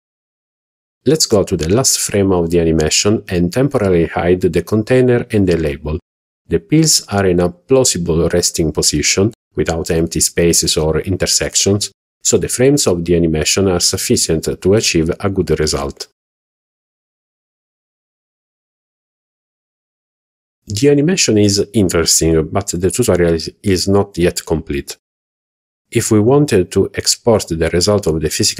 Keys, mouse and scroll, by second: 0.7 click, 3.5 click, 6.6 h, 7.8 click, 8.6 h, 9.2-11.7 middle drag, 12.0-12.6 scroll up 2, 12.7-15.3 middle drag, 16.7-17.0 middle drag, 17.1 scroll down 1, 17.3 middle click, 18.9-19.7 scroll down 4, 19.4 click, 19.7 shift+middle click, 20.0 middle click, 20.7 click, 25.0 click, 25.4 scroll up 2, 26.9 click, 27.4 alt+h, 28.0 z.